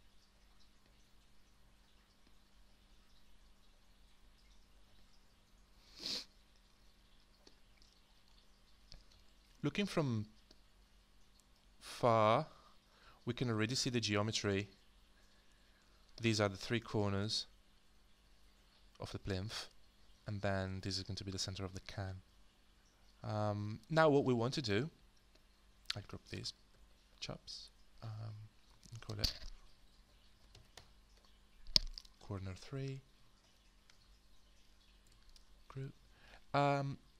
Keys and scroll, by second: 26.7 ctrl+g, 28.7 Return, 29.9 Return, 30.0-31.6 typing, 33.6-34.5 typing, 35.1 Return.